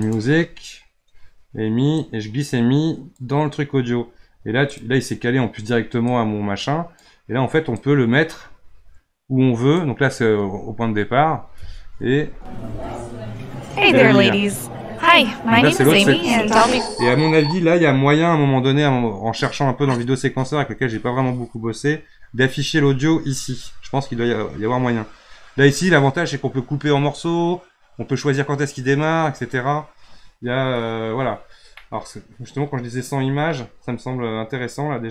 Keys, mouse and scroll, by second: 4.7 click, 6.1-10.8 drag, 12.2 space, 16.6 space, 30.2-31.1 scroll down 7, 31.1 scroll down 3, 31.8-33.9 middle drag, 33.9-35.1 scroll down 3.